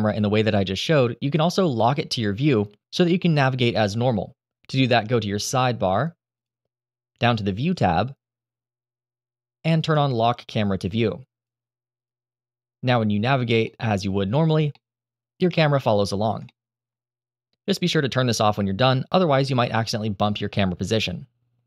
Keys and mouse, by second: 6.1 click, 7.5 click, 10.7 click, 11.7 click, 13.5 middle click, 14.4 shift+middle click, 16.2 shift+middle drag, 18.5 click.